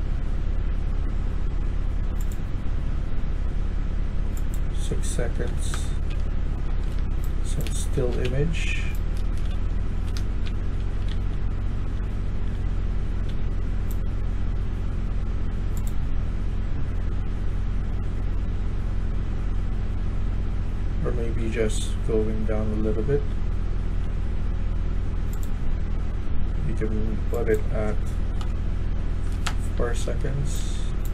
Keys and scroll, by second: 5.4-7.2 typing, 5.6 Return, 8.4-11.5 typing, 13.3 typing, 21.3 e, 22.0 e, 23.1 e, 23.9 e, 28.3 4, 29.3 Return, 29.6-31.1 typing.